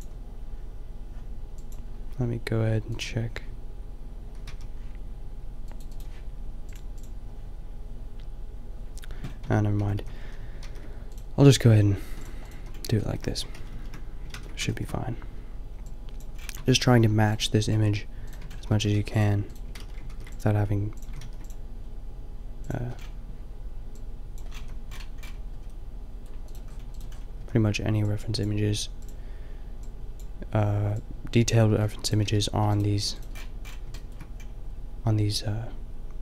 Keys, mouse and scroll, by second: 9.5 Tab, 9.8 a, 10.0 a, 10.2 a, 11.1 ctrl+r, 11.5 ctrl+r, 11.5-12.2 scroll up 1, 12.2 click, 12.3 click, 12.7 a, 12.8 right click, 13.1 middle click, 13.6 ctrl+z, 13.7 ctrl+z, 14.3 ctrl+z, 16.6 Tab, 17.0 g, 17.8 g, 18.4 Tab, 18.7 a, 18.9 ctrl+r, 19.8 ctrl+z, 20.2 ctrl+r, 21.1 a, 21.3 ctrl+r, 22.8 Tab, 24.6 a, 26.5 right click, 27.4 a, 29.0 a, 32.1-33.1 middle drag, 32.3 g, 33.0 g, 33.4-34.4 middle drag.